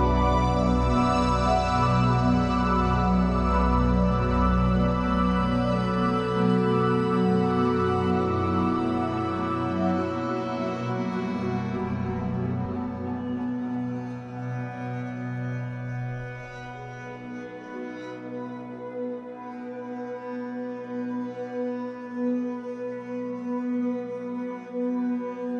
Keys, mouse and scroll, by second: 1.0-2.6 middle drag, 2.6-6.1 drag, 6.1 middle click, 7.0-12.2 drag, 11.8-12.2 scroll down 2, 12.2-15.9 middle drag, 12.5-12.9 scroll down 2, 13.6-14.8 scroll up 4, 15.0-15.9 scroll up 2, 15.9-18.4 drag, 18.4-19.4 middle drag, 19.4-25.5 drag.